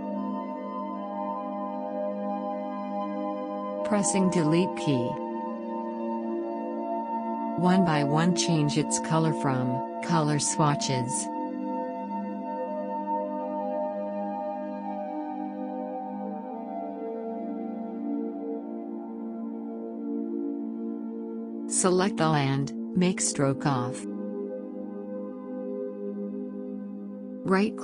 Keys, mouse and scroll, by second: 5.8 click, 7.7 shift+click, 13.4-16.8 shift+drag, 17.3-18.7 shift+drag.